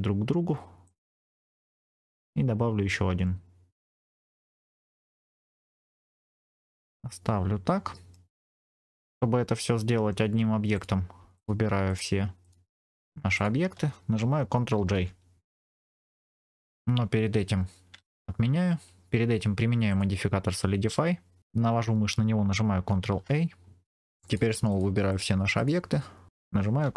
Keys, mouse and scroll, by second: 0.7 click, 2.0 shift+d, 4.0 click, 4.8 click, 4.9 middle click, 5.7 scroll down 2, 5.9 middle click, 6.0 click, 6.2-8.0 middle drag, 10.6 click, 11.2 shift+click, 14.7 ctrl+j, 15.5-16.6 middle drag, 17.1-17.8 scroll up 3, 17.9 ctrl+z, 19.8 click, 22.9 ctrl+a, 24.0 click, 24.1 shift+click, 25.0 shift+click.